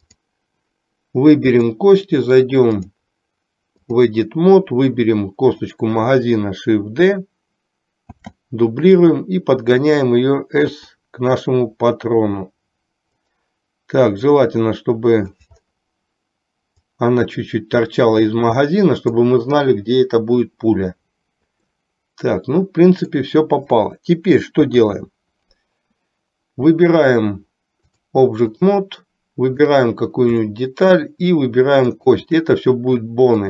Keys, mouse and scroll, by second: 0.2 click, 1.6 click, 2.8-4.3 drag, 8.2 shift+d, 10.8 s, 14.6 click, 16.8-19.3 drag, 21.8-23.3 middle drag, 24.7 KP_3, 28.0 click, 29.7 click, 30.7 shift+middle click, 32.1 shift+click.